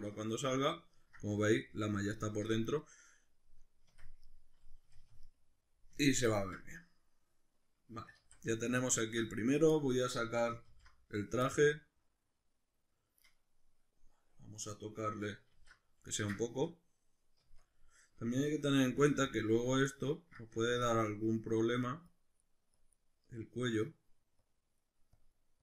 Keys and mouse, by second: 0.1 \, 1.3 z, 3.9 Tab, 4.2 middle click, 4.8 a, 5.0-13.2 middle drag, 8.2 alt+q, 10.7 alt+h, 13.2 right click, 15.5 alt+q, 16.1-18.9 ctrl+middle drag, 17.4 Tab, 18.9 f, 19.3 click, 19.9 ctrl+middle click, 20.5 f, 21.1-23.3 drag, 23.3-24.4 middle drag, 24.4-25.6 drag.